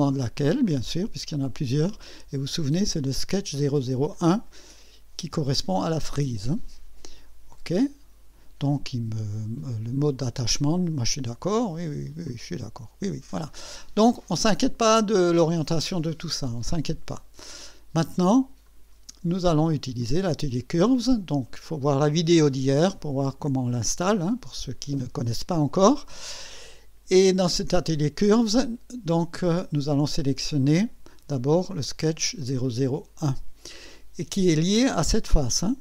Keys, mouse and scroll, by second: 0.6 click, 6.5 click, 7.5 click, 12.3 click, 13.6-13.9 scroll down 1, 14.2 click, 15.4-16.5 drag, 18.6 click, 20.0 click, 23.0 click, 33.2 click.